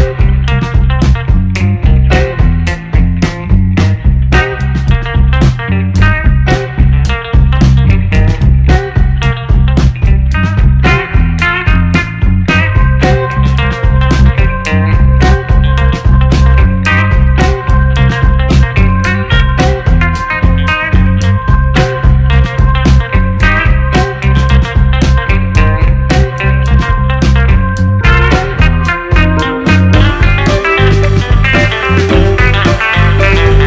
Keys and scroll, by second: 2.8-6.0 typing, 9.7-11.4 typing, 13.7 shift+b, 13.9 h, 14.1 s, 14.2 a, 17.5 ctrl+z, 23.9 Delete, 27.0-29.3 typing, 31.2 shift+b, 31.3 a.